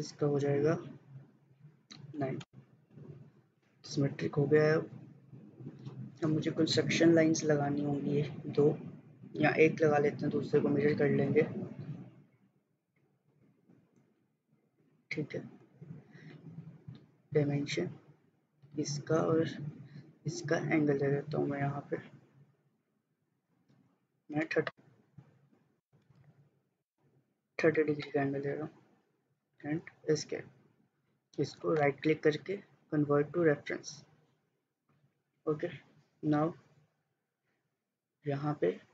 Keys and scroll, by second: 2.3 9, 2.5 Return, 4.5 Escape, 15.7 Escape, 24.1-25.0 typing, 26.3-28.2 typing, 29.7 Escape.